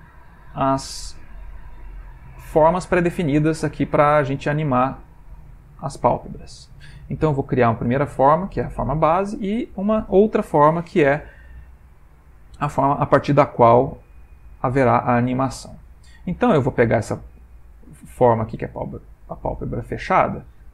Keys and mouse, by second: 0.5 z, 2.1 ctrl+middle click, 2.3 ctrl+middle click, 7.3 click, 10.7 click, 18.5 Tab, 19.7 alt+click.